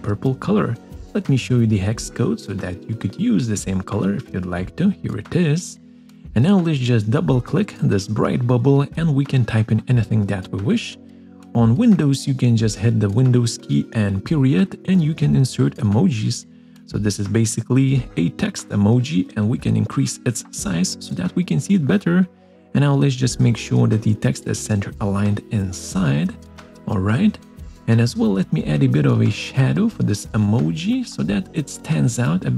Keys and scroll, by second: 9.0 super+..